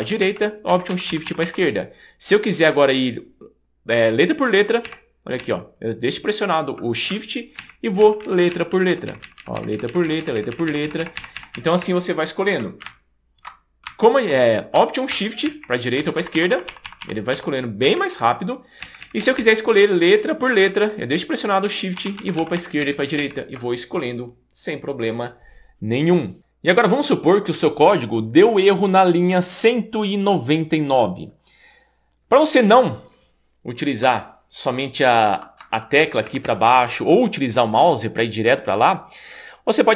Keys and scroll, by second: 0.7 alt+shift+Left, 4.9 shift+Right, 7.6 shift+Right, 15.5 alt+shift+Right, 16.0 alt+shift+Left, 17.9 alt+shift+Right, 18.8 alt+shift+Right, 22.2 shift+Left, 22.8 shift+Right, 34.1 Escape, 35.3 Escape, 36.0 Down, 36.3 Down, 36.4 Down, 36.7 Down.